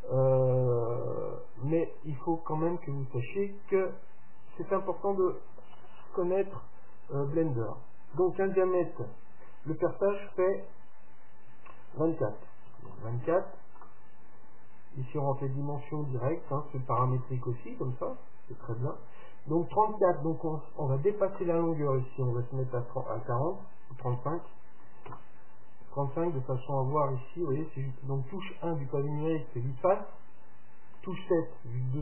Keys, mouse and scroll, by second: 2.0-4.0 drag, 15.1-17.0 drag, 20.7-22.7 drag, 27.7 KP_1, 31.0 KP_7.